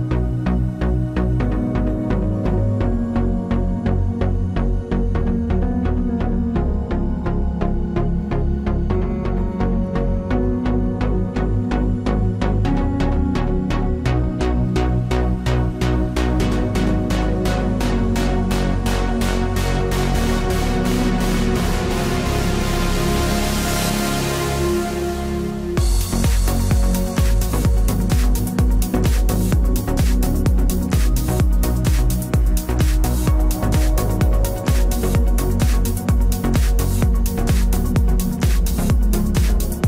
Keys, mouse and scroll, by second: 0.1-1.9 right drag, 0.8 b, 1.8-4.8 drag, 3.6 g, 4.6 right click, 4.8-6.0 middle drag, 6.0-7.8 right drag, 6.2 b, 7.1-9.1 drag, 8.8-12.5 middle drag, 10.9 ctrl+r, 12.5 click, 12.6-13.6 right drag, 13.2 KP_Decimal, 13.6 middle click, 14.1 b, 14.6 g, 16.4 ctrl+r, 18.4 right click, 18.7 b, 19.1 g, 23.0 ctrl+r, 25.9 right click, 26.6 KP_Decimal, 27.0 right click, 27.5 b, 28.0 g, 31.0 ctrl+r, 33.7 middle click, 34.6 right click, 35.2 KP_Decimal, 36.4 b, 37.6 g, 38.4-39.8 drag.